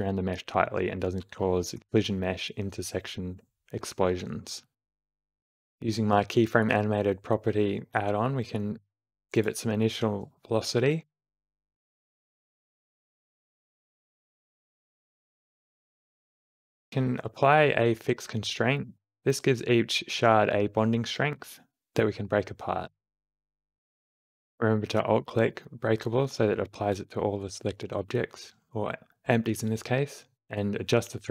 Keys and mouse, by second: 0.0 space, 2.2 space, 2.4 shift+Left, 3.5 click, 4.3 r, 5.3 click, 6.6 click, 7.4 Left, 7.4 Right, 8.3 g, 9.8 Right, 11.6 g, 12.4 click, 13.0 shift+Left, 13.2 space, 13.7 space, 17.9 q, 21.4 shift+Left, 21.4 space, 22.5 alt+click, 23.1-24.6 alt+drag, 25.8 space, 29.8-31.3 alt+drag.